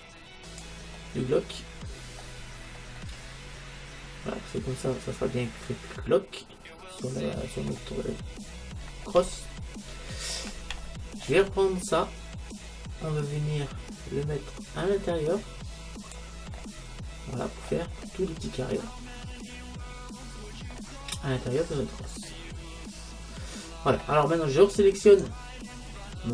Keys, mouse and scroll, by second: 1.0-4.8 middle drag, 8.3-12.6 middle drag, 12.6-14.4 drag, 16.6-18.5 middle drag, 18.5-18.9 scroll up 1, 18.9-20.6 middle drag, 21.2-21.7 scroll up 1, 21.7-22.3 scroll up 1, 22.3-23.5 middle drag, 25.1-26.3 right drag.